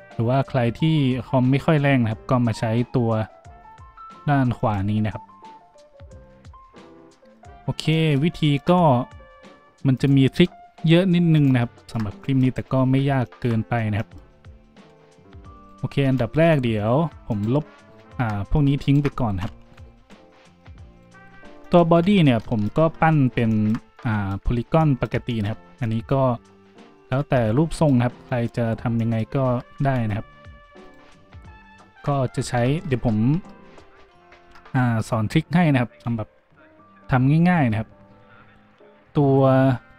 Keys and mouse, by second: 12.5 middle click, 12.6-17.3 drag, 14.7 z, 16.0 b, 17.3 middle click, 17.4 drag, 18.0 shift+middle click, 18.8 shift+middle click, 20.0 Delete, 20.9 middle click, 21.3 z, 21.9 `, 22.3-30.8 shift+drag, 22.8 Tab, 29.5 Tab, 29.5 `, 29.8 `, 30.5 a, 30.8 middle click, 30.9 Tab, 32.5 shift+a, 33.3 Tab, 34.0 a.